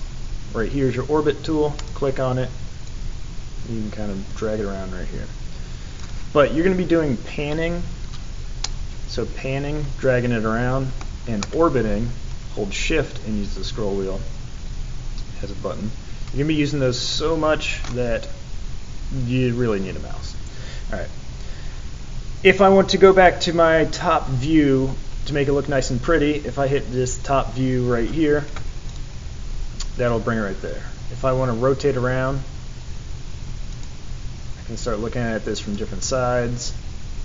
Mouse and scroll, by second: 1.7 click, 2.8-6.0 drag, 8.6-11.0 middle drag, 11.4-12.5 middle drag, 12.6-17.8 middle drag.